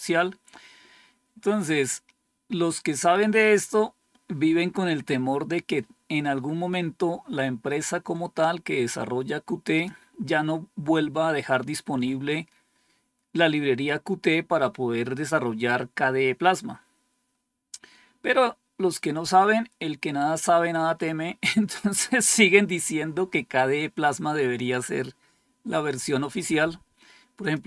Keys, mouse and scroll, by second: 27.3 click.